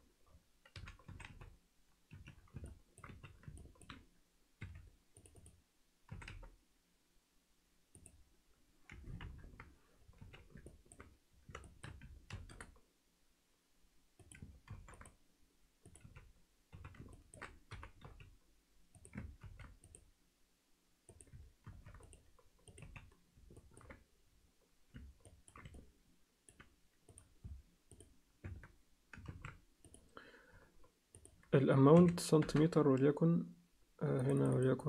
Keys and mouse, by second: 1.0 s, 2.7 alt+middle click, 3.1 z, 3.6 ctrl+alt+middle click, 4.6 3, 5.2 click, 6.1 s, 9.2 ctrl+KP_1, 10.2 z, 10.6 ctrl+alt+middle click, 11.6 alt+shift+middle click, 12.3 ctrl+r, 14.7 ctrl+r, 16.0 z, 16.7 z, 17.1 ctrl+alt+middle click, 17.7 g, 19.4 ctrl+r, 21.6 ctrl+r, 22.8 z, 23.6 ctrl+middle click, 25.2 ctrl+alt+middle click, 25.7 alt+middle click, 27.1 click, 28.4 Tab, 29.3 ctrl+a, 31.2-33.7 drag, 34.2 click, 34.4 click, 34.5 click.